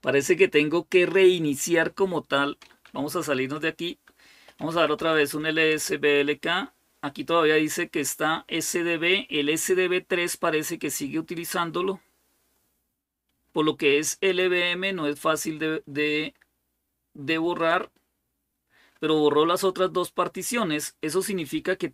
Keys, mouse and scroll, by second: 4.2-5.6 typing.